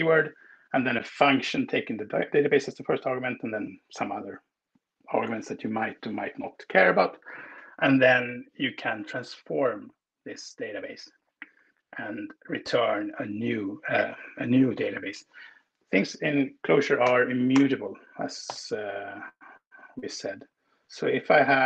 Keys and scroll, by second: 16.9 Return, 17.5 Return, 18.3 shift+8.